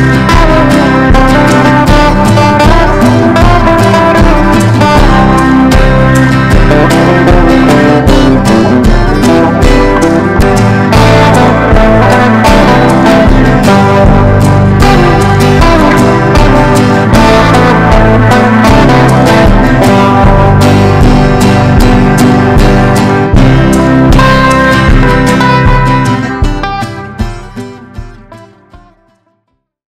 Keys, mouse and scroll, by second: 0.9 ctrl+g, 5.3-7.4 drag, 7.4 Down, 7.9 Down, 8.0 Down, 11.6 click.